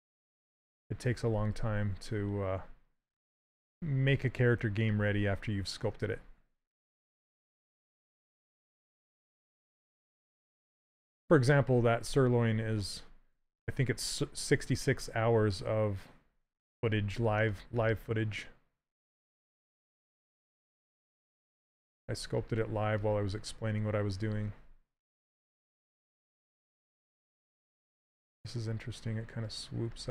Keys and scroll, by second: 0.0 s, 6.8 s, 20.8 s, 26.0 s.